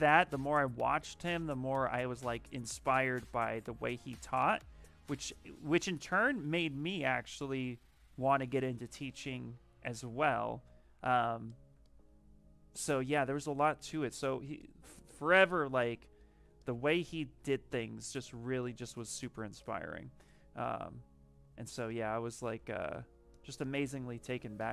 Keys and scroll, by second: 17.2 ctrl+z.